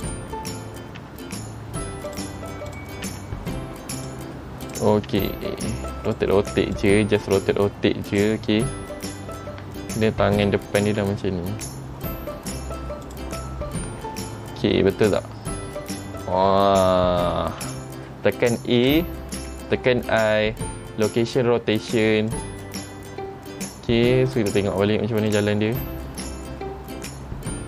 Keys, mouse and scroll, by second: 0.2 click, 1.2 r, 2.9 click, 3.2 r, 4.8 click, 5.2 r, 6.9 click, 7.4 r, 10.5 click, 11.1 r, 14.2 middle click, 20.3 i, 24.5 click, 25.5 click.